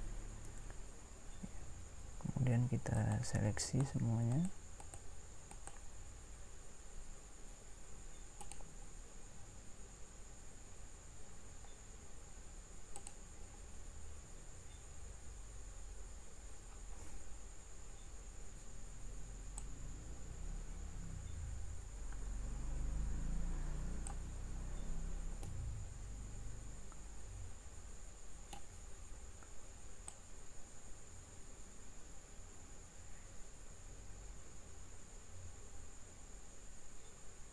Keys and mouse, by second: 25.6-27.4 middle drag, 30.1 click.